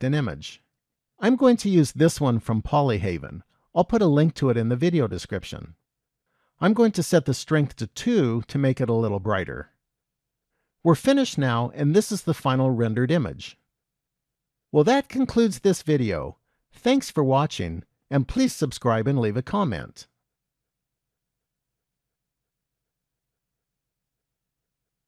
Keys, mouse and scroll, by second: 7.5 click.